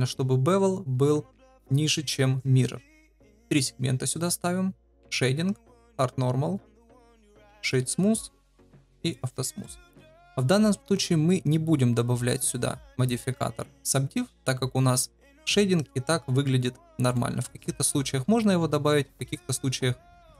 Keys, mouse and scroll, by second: 3.4 click, 3.5 click, 5.0 click, 5.7 click, 7.3 right click, 8.4 click, 9.0 click, 9.6 shift+middle drag, 10.0 middle click, 11.2-11.6 shift+middle drag, 11.6 shift+click, 12.1-12.7 middle drag, 17.1 middle drag, 17.3 click.